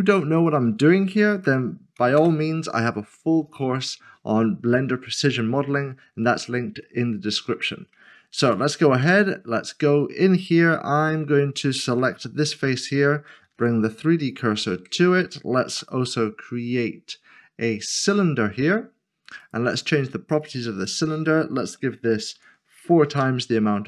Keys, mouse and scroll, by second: 0.4 click, 1.3 typing, 2.2 Return, 3.5 click, 3.9 scroll down 1, 6.8 scroll down 1, 7.0 middle click, 8.4 click, 11.0 Tab, 11.2 middle click, 12.1 typing, 12.4 click, 13.5-14.3 typing, 14.8 Tab, 15.6 typing, 17.9 click, 22.8 typing, 23.1 Return.